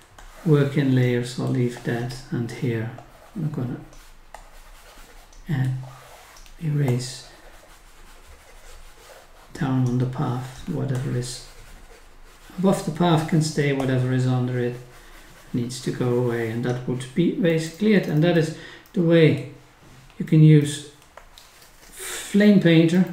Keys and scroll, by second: 17.5 scroll up 1, 18.0-18.4 scroll down 1, 21.1 scroll down 1, 22.9 scroll up 1.